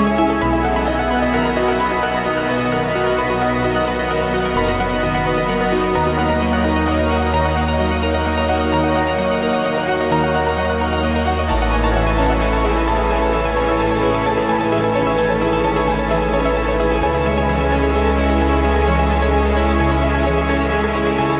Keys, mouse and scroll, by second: 6.4-8.7 drag, 9.4-11.4 drag, 11.9-14.0 drag, 14.2-16.2 drag, 17.0-18.3 drag, 18.8 click, 19.1 click, 19.9-21.3 drag.